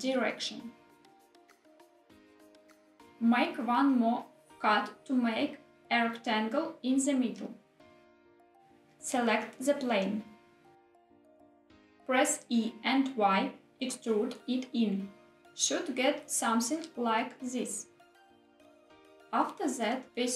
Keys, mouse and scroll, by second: 0.7 click, 0.9 s, 1.2 z, 2.6 click, 4.1 ctrl+r, 8.1 click, 8.9 3, 10.1 click, 11.6-11.9 middle drag, 12.1 e, 12.9 y, 18.8 click, 19.2 middle click, 19.9 ctrl+r.